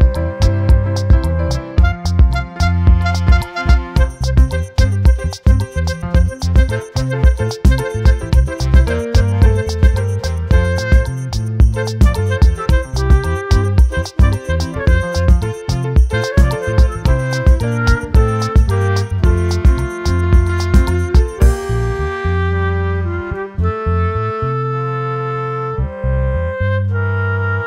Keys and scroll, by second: 2.2 ctrl+j, 6.6 ctrl+j, 10.5 ctrl+t, 17.6 ctrl+t.